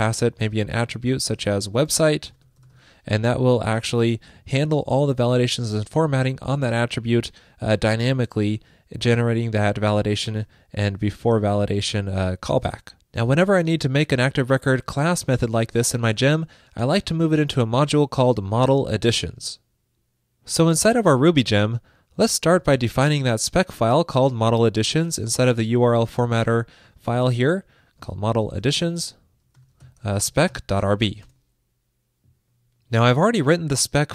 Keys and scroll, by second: 3.9 alt+shift+Left, 9.9 alt+Left, 12.4 alt+shift+Left.